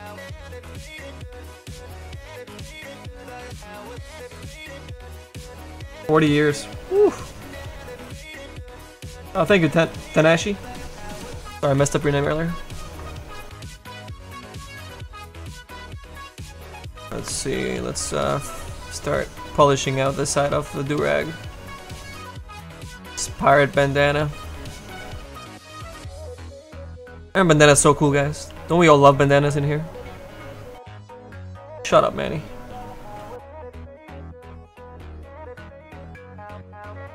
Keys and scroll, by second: 17.7 s, 20.1 s, 28.5 s, 28.9 s, 29.3 s.